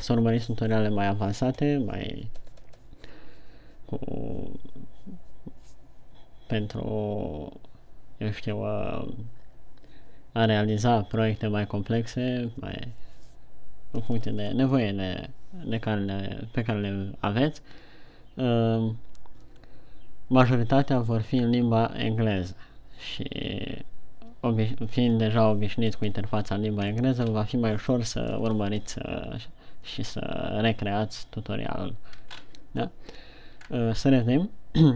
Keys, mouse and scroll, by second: 27.3-27.7 scroll down 2, 27.7 scroll up 2, 32.7-34.0 shift+scroll up 4, 34.0-34.4 shift+scroll down 2.